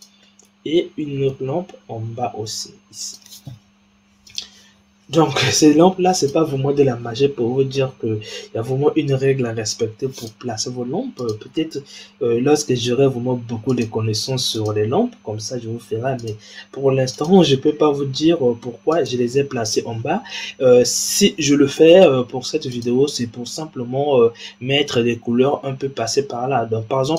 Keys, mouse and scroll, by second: 0.1-1.3 middle drag, 1.3 shift+d, 4.2 click, 4.9-6.1 scroll down 2, 6.1 click, 7.6 g, 11.1 click, 12.3 g, 14.4 click, 15.1 g, 17.0 click, 17.8 g, 19.6-20.9 scroll up 6, 20.9-22.6 scroll down 3, 22.6-22.9 drag, 26.9 click.